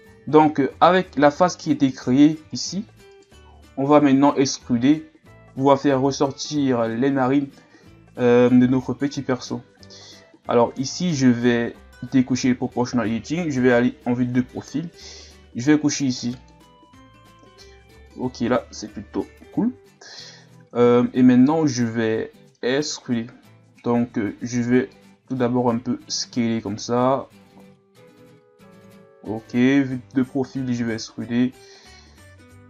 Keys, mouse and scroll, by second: 0.4-0.8 scroll up 1, 0.8 right click, 1.9 right click, 2.5 shift+right click, 3.1 shift+right click, 12.0 click, 13.6 KP_3, 16.4 click, 17.4-18.8 middle drag, 18.8 KP_3, 19.9-21.6 scroll down 4, 21.7-22.3 scroll down 1, 22.3-22.7 scroll up 1, 22.7-24.3 scroll down 3, 24.9 middle click, 25.6 s, 29.5 KP_3, 30.2-30.8 scroll down 4, 30.8 e.